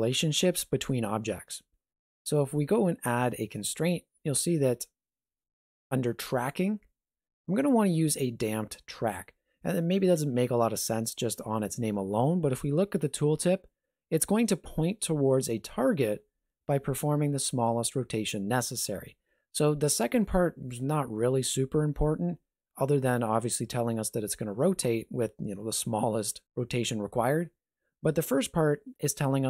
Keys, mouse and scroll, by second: 3.1 click.